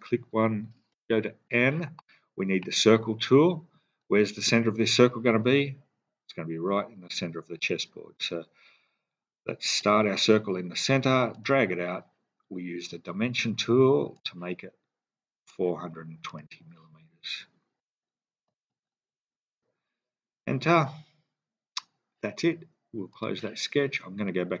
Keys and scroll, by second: 0.9 n, 18.5-19.1 typing, 19.4 Return.